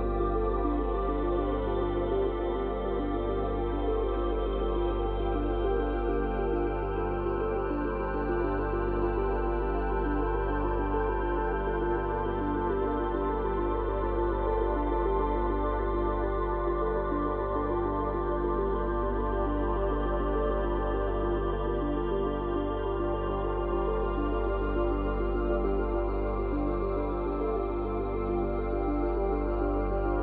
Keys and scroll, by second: 4.8 space, 12.8 space, 13.6 space, 18.9 space, 23.7 space, 26.6 space, 29.8 space.